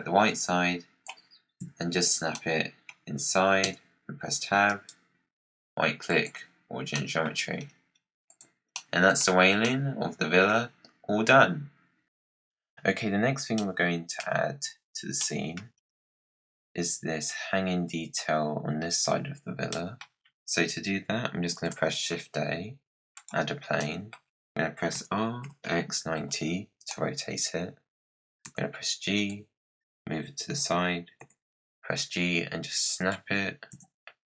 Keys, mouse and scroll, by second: 1.5 KP_Decimal, 2.2-3.6 middle drag, 3.6 Tab, 4.6-6.8 right drag, 6.8-7.2 middle drag, 7.2-8.2 scroll down 15, 8.2 click, 8.6-9.4 middle drag, 9.4 scroll up 3, 9.6-12.0 middle drag, 13.5-14.6 middle drag, 14.6-15.1 scroll down 7, 15.1 middle click, 15.7-16.3 scroll up 5, 19.6 middle click, 20.0-21.4 scroll down 1, 21.4 shift+a, 23.7-24.8 middle drag, 24.8 r, 28.3 g, 31.1 g, 33.6 KP_Decimal.